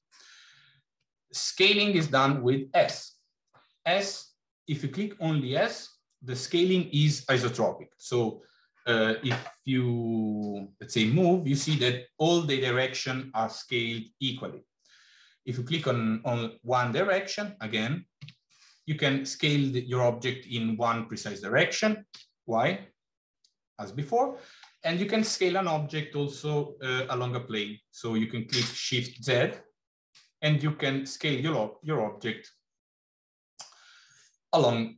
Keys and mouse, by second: 1.4-1.8 middle drag, 2.7 s.